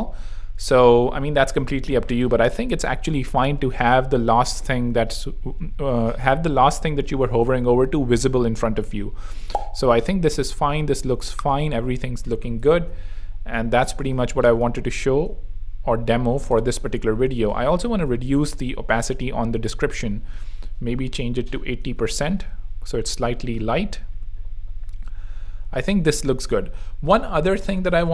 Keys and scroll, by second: 12.7 super+2, 14.0 v, 17.0 6, 17.5 shift+e, 17.9 shift+super+3, 18.5 super+r, 19.9 super+2, 21.1 8, 21.5 super+3, 21.8 super+r, 22.6 r, 26.6 super+2, 27.6 z.